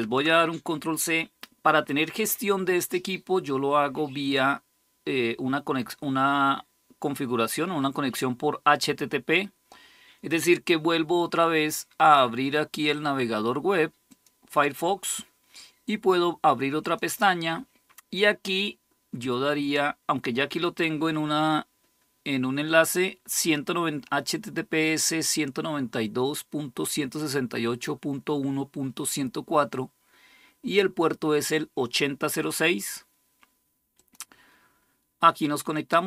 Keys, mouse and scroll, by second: 13.9 click, 16.6 click, 23.2 click, 33.7 click, 35.5 click.